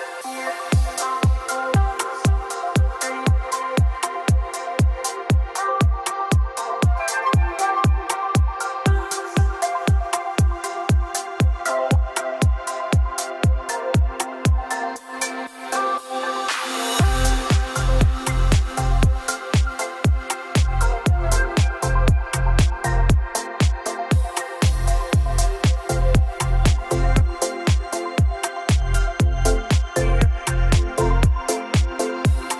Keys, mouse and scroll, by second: 0.6 click, 0.7-3.5 typing, 5.6 o, 6.4 click, 7.1-7.5 scroll down 2, 7.6-8.4 scroll up 5, 10.3 click, 11.1 a, 16.4-17.3 typing, 19.0-22.2 drag, 22.6 click, 22.8 f, 24.9-25.7 typing, 26.0 Return, 29.0-29.7 scroll up 14, 29.7 scroll down 1, 31.1 click, 31.8 middle click, 31.8 middle click.